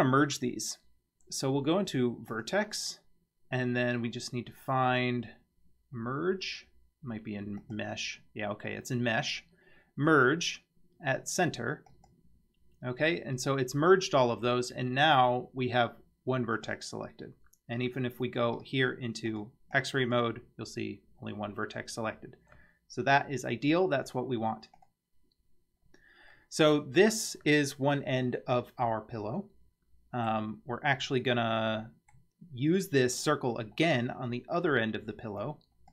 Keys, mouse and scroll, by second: 2.3-7.0 drag, 7.6-12.1 drag, 16.6 click, 18.6 click, 19.3 click, 19.8-20.1 drag, 24.8 click, 25.8-26.3 scroll down 3, 26.3-27.1 middle drag, 28.8-30.3 middle drag, 31.0 scroll up 2, 31.7-32.1 middle drag, 33.8 scroll down 3, 35.4 click.